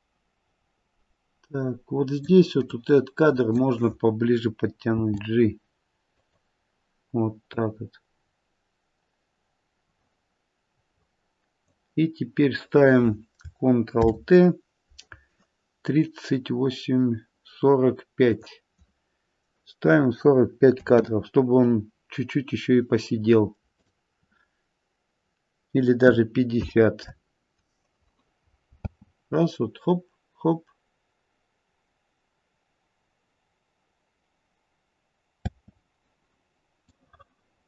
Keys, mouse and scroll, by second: 2.6 click, 4.9 g, 7.6 click, 13.9 ctrl+t, 18.3 click, 20.6 KP_4, 20.8 KP_5, 23.7 click, 28.9 space, 35.4 space, 36.9 click.